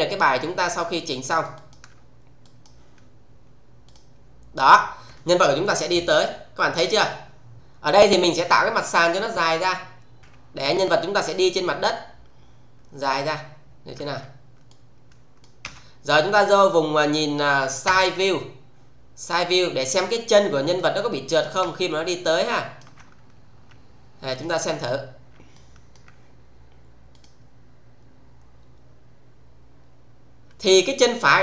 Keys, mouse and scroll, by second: 0.1 scroll down 1, 0.8 alt+middle click, 3.9 click, 7.5 click, 10.2 r, 11.1-12.0 click, 12.0 scroll down 1, 13.0 click, 13.6-14.1 scroll down 1, 14.1 w, 14.6-15.5 click, 15.5 space, 17.8 space, 18.5 scroll down 1, 19.3-19.8 click, 21.6 space, 21.9 click, 22.1-22.8 space, 24.3 click, 24.6 scroll down 1, 25.5-26.1 alt+middle click, 27.1 click.